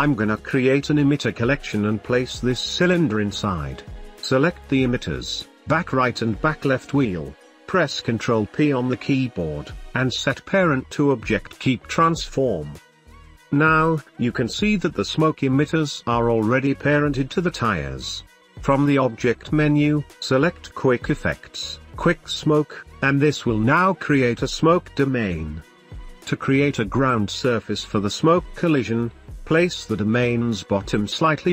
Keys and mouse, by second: 1.1 m, 3.0 t, 4.5 middle click, 5.1 ctrl+click, 5.2 shift+middle click, 5.7 ctrl+click, 7.6 ctrl+p, 12.2 middle click, 13.1-13.6 shift+middle drag, 14.5 g, 16.5 g, 16.7 click, 16.9 space, 18.3 space, 28.8 KP_3, 29.5 g, 30.7 drag, 30.9-31.5 middle drag.